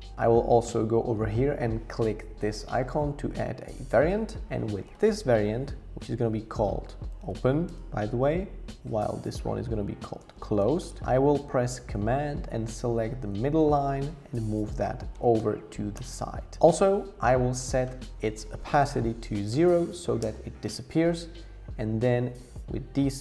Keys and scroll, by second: 6.6-7.7 typing, 7.7 Return, 9.8-11.1 typing, 14.5 shift+Left, 14.7 shift+Left, 14.9 shift+Left, 19.5 0, 20.2 Return.